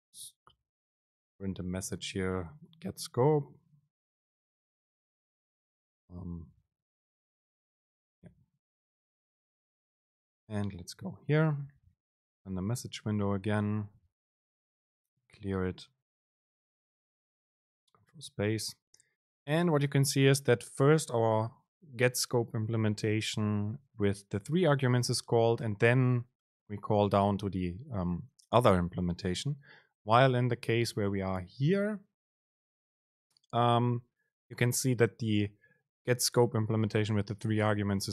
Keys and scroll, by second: 1.1 super+v, 1.6 Right, 3.4 ctrl+shift+super+F9, 7.2 Return, 8.4 BackSpace, 17.8 super+space, 31.8 super+space.